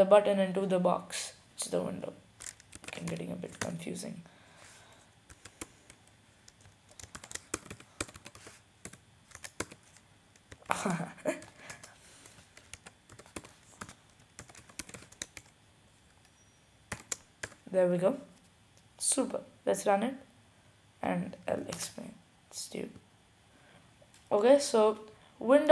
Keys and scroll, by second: 2.8 typing, 4.0-4.8 typing, 6.0-6.8 typing, 8.0-9.0 typing, 10.0-10.8 typing, 12.0-12.8 typing, 14.0-14.9 typing, 16.3 typing, 18.0-18.8 typing.